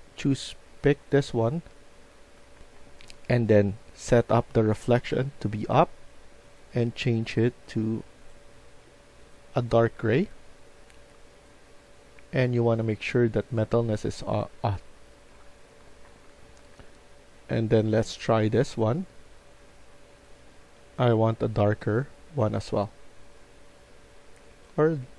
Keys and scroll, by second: 2.5 F1, 15.2 F1, 15.6-17.0 typing.